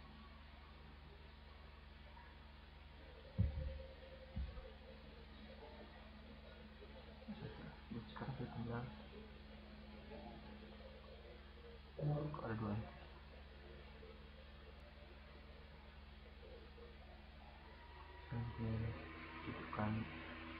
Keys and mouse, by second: 1.5-4.0 drag, 6.5-7.5 middle drag, 7.6-12.4 middle drag, 12.8-14.0 right drag, 14.5-16.1 right drag, 16.6 click, 17.3-17.7 drag, 19.9-20.5 right drag.